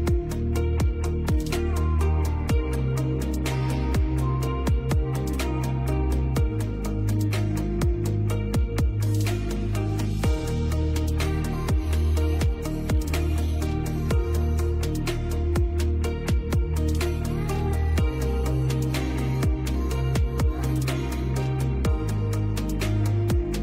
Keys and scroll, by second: 5.8 Escape, 10.6 space, 11.9 l, 12.3 Escape.